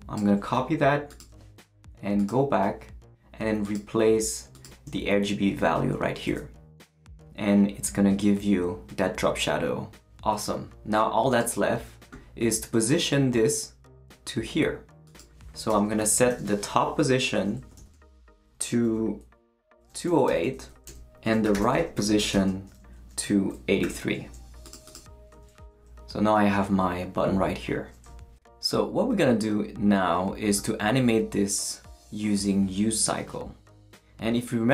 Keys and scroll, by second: 6.3 super+v, 15.7 Return, 16.1-17.8 typing, 19.6-23.8 typing, 20.9 Return.